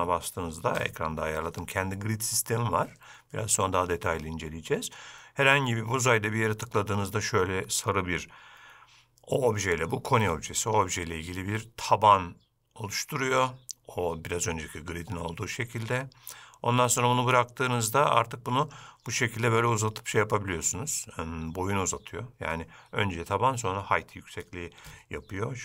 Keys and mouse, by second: 8.2-25.6 drag.